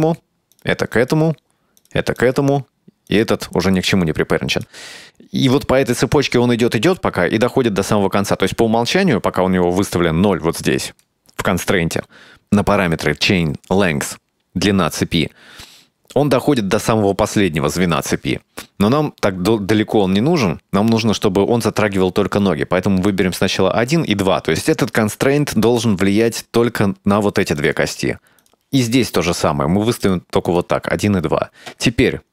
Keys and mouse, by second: 0.6 right click, 1.0 right click, 1.9 right click, 2.3 right click, 3.2 right click, 4.6 right click, 10.6-12.4 drag, 20.0 click, 23.2 click, 27.3 right click, 27.7 right click, 28.5 right click, 30.2 click.